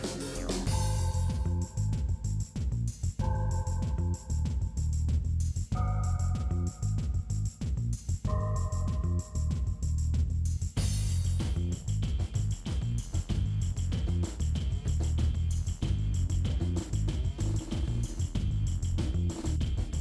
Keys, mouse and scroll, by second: 0.2 KP_1, 0.4-1.1 scroll up 8, 2.2 middle click, 2.9 click, 3.3 l, 3.4 middle click, 4.1 l, 4.3 shift+middle click, 4.8 l, 5.1 KP_1, 5.2 scroll up 5, 5.5 click, 6.7-7.1 scroll down 7, 7.1 middle click, 7.6 click, 7.7 scroll down 1, 7.8 middle click, 8.5 ctrl+s, 10.4 shift+a, 11.2 g, 12.3 shift+middle click, 13.0 s, 13.6 middle click, 14.3 KP_1, 14.7 KP_3, 15.1 Left, 15.1 scroll up 4, 15.4 g, 16.2 scroll up 5, 16.4 shift+middle click, 16.7 scroll down 2, 16.8 shift+middle click, 17.2 g, 18.0-18.4 scroll up 2, 18.1 shift+middle click, 18.4 shift+middle click, 18.8 g, 19.4 shift+middle click, 19.7 g.